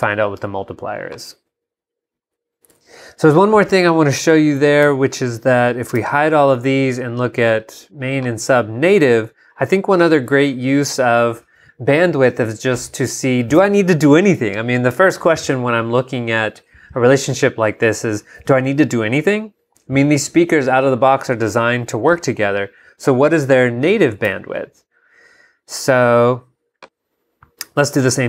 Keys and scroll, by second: 2.7 super+Tab, 4.8 super+y, 5.9 shift+super+y, 24.3 super+y.